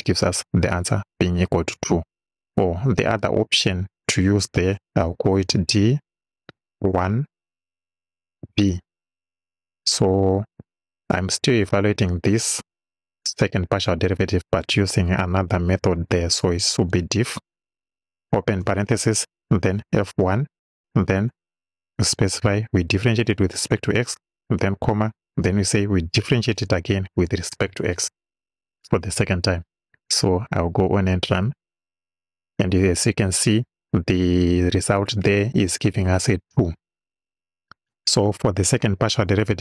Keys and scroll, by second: 3.9 Return, 5.4 d, 6.6 1, 9.5 b, 16.6 d, 16.9 i, 18.3 shift+f, 18.6 shift+9, 19.8 f, 20.3 1, 23.6 x, 24.8 ,, 27.1 x.